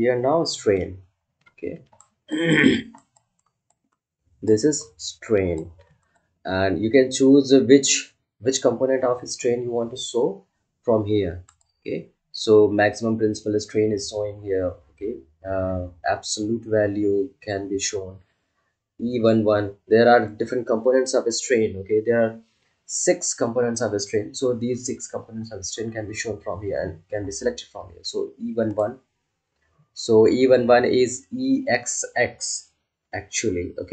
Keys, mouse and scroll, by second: 1.1 ctrl+alt+scroll down 1, 1.9-7.8 ctrl+alt+drag, 11.4 click, 28.7 click.